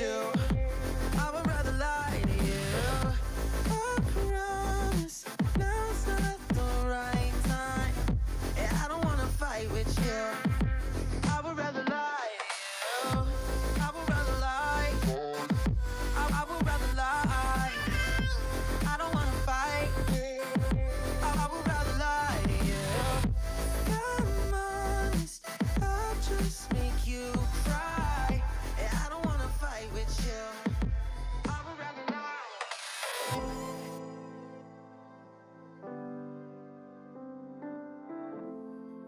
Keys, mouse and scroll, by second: 0.2 ctrl+KP_3, 0.4 scroll up 6, 0.7 Tab, 1.2 drag, 2.0 shift+s, 2.5 scroll up 1, 2.7-3.3 scroll down 8, 2.9 middle click, 3.3 Tab, 3.5-4.2 right drag, 4.2 click, 4.7 shift+c, 5.2 middle click, 5.7 click, 6.3 click, 6.7 shift+click, 9.0 shift+d, 10.4 Tab, 10.8 a, 11.4 r, 12.4 KP_3, 13.3-14.0 scroll up 2, 13.4 shift+middle click, 14.0 shift+middle click, 14.7 g, 16.7 shift+middle click, 17.0-17.5 scroll up 7, 17.5 shift+middle click, 17.8 alt+z, 18.1 alt+z, 18.4 middle click, 18.9-19.5 scroll down 7, 19.5 KP_1, 20.1 g, 22.1 alt+z, 22.4 shift+middle click, 22.6-23.3 scroll up 5, 23.3 g, 25.9 click, 26.0 Tab, 26.2 click, 26.9 click, 27.7-28.0 scroll down 6, 28.0 click, 28.4 Tab, 28.6 scroll up 3, 29.0 alt+z, 29.4 click, 30.0 alt+z, 30.5 g, 32.5 click, 32.9 KP_3, 33.3 alt+z, 33.5-33.9 scroll down 3, 34.1-34.4 scroll down 1, 34.4 click, 34.9-35.4 scroll up 4, 35.4 shift+middle click, 35.6 scroll up 1, 36.3 s.